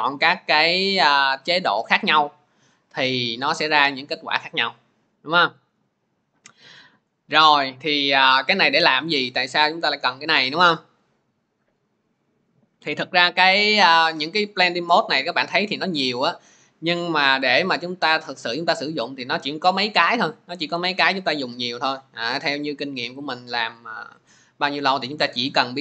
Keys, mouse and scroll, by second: 15.8-21.0 drag.